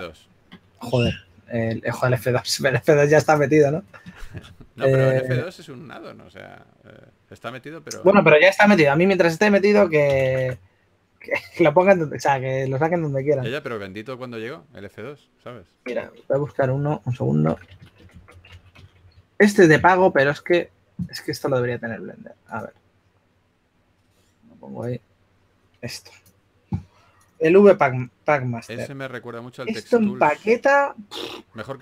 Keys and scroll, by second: 5.7 super+t, 11.5 typing, 15.1-16.3 typing, 17.6-19.9 typing, 21.8 typing.